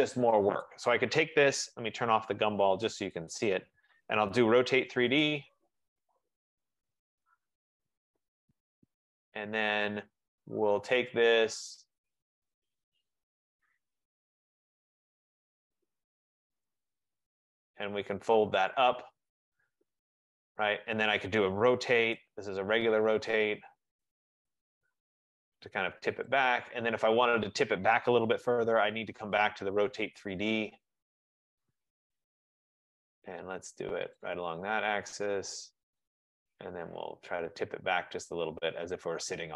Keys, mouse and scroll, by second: 0.8 click, 3.4 middle click, 3.4 click, 5.0-8.5 typing, 5.8-8.4 drag, 12.4-14.6 drag, 16.8 click, 18.8 click, 21.4 right click, 21.8-22.3 typing, 24.2 click, 25.1 click, 26.7 click, 29.2-29.8 typing, 31.5 Return, 31.8 click, 34.3 F15, 34.4 click, 36.1 shift+click, 39.2 click.